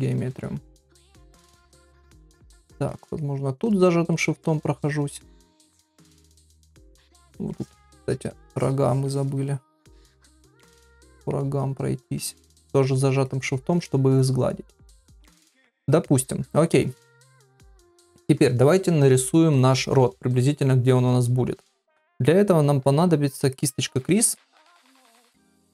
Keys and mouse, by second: 0.1 ctrl+r, 1.1 middle click, 2.6 shift+click, 2.9 middle click, 3.7 shift+click, 4.1 middle click, 4.8 shift+click, 5.2 shift+middle click, 5.9 shift+click, 6.5 shift+click, 6.8 shift+click, 7.6 shift+click, 7.9 shift+click, 8.5 shift+click, 8.8 shift+click, 9.1 shift+click, 9.8 middle click, 10.6 shift+middle click, 10.9 middle click, 12.4 shift+click, 12.7 shift+click, 13.2 shift+click, 13.9 middle click, 15.3 middle click, 15.8 middle click, 16.5 middle click, 18.2 KP_1, 24.4 ctrl+middle click, 24.7 shift+middle click.